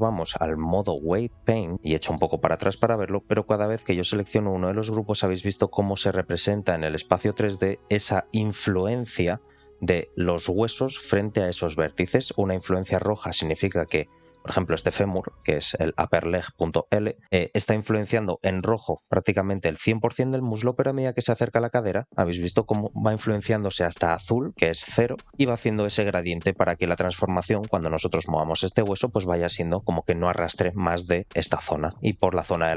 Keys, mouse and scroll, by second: 1.7 scroll down 4, 2.0 shift+middle click, 3.6 click, 4.1 click, 5.3 click, 7.3 click, 12.8 alt+middle click, 13.2 scroll up 2, 13.6 middle click, 14.0 scroll down 1, 14.2 shift+middle click, 17.2-19.6 scroll down 1, 20.3 shift+middle click, 20.6 scroll up 2, 21.1 shift+middle click, 26.4-26.7 scroll down 3, 26.7 shift+middle click, 30.8 shift+middle click, 31.8 shift+middle click, 32.3 middle click.